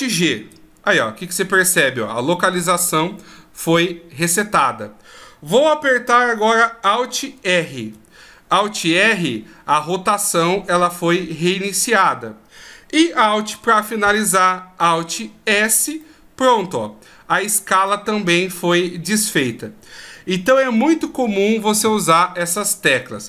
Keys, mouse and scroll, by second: 0.3 alt+g, 7.8 alt+r, 9.4-10.3 scroll down 1, 10.3 middle click, 10.3-11.0 scroll down 1, 15.3 alt+s, 16.0 middle click, 17.0-17.4 scroll up 2, 17.9 middle click, 17.9-18.4 scroll up 3.